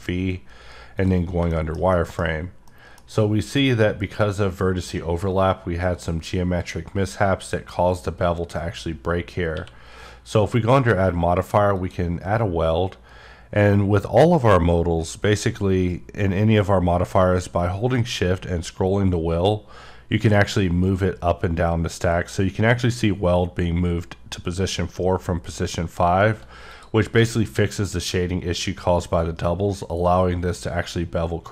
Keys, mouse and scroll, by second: 1.0 click, 1.5 middle click, 1.9 double middle click, 2.3-2.7 scroll up 2, 2.7 middle click, 3.0 scroll up 3, 6.1-7.2 scroll down 2, 11.9 click, 19.4-20.5 scroll up 1, 20.6-21.0 scroll down 1, 21.0 scroll up 1, 21.6 scroll down 1, 22.2 scroll up 1, 22.8 scroll down 1, 23.3 scroll up 1, 24.8-25.2 scroll down 1, 25.2 scroll up 1, 26.7 click, 27.2-27.6 scroll up 1, 27.6-28.5 scroll down 3.